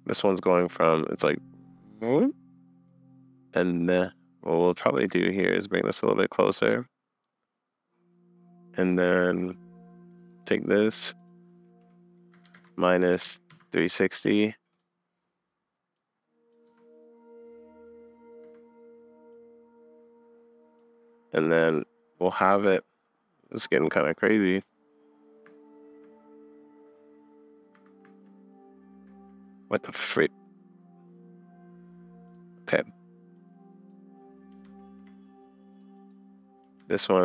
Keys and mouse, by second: 0.0 middle click, 0.2 middle click, 3.7 middle click, 4.5 click, 4.9 g, 7.2 click, 7.8 click, 9.4 click, 11.3-13.5 drag, 16.7 space, 18.5 space, 19.3 click, 22.0 middle click, 23.3 middle click, 24.6 click, 24.9 middle drag, 27.7 a, 29.0 `, 32.3 click, 33.4 click, 33.8 middle click, 34.6 Up, 35.0 Down, 35.7 click, 36.8 Up.